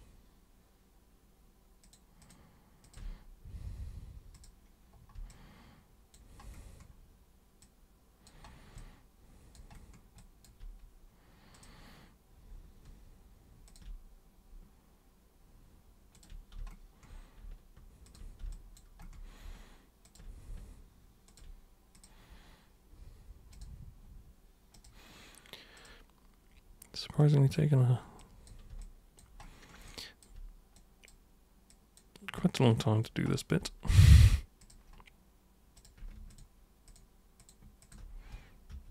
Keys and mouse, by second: 1.8 ctrl+shift+super+click, 2.2 ctrl+shift+super+click, 2.8 ctrl+shift+super+click, 4.4 super+click, 5.3 alt+super+click, 7.6 alt+super+click, 8.8 alt+super+click, 10.2 alt+super+click, 11.5 super+click, 13.7 ctrl+super+click, 16.1 ctrl+super+click, 18.1 ctrl+super+click, 18.5 alt+super+click, 20.1 ctrl+super+click, 21.3 ctrl+super+click, 22.0 super+click, 23.6 super+click, 24.7 super+click, 25.8 super+click, 27.2 super+click, 28.2 super+click, 28.8 alt+super+click, 29.9 alt+super+click, 30.8 super+click, 31.7 super+click, 32.4 alt+super+click, 34.6 super+click, 35.8 super+click, 36.3 ctrl+shift+super+click, 36.9 ctrl+shift+super+click, 37.4 ctrl+shift+super+click, 37.9 ctrl+shift+super+click, 38.7 super+w.